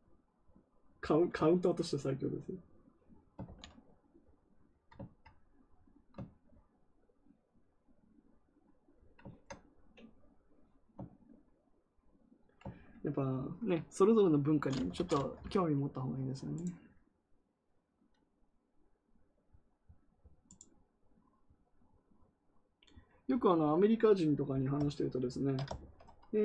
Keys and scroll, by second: 3.3 ctrl+z.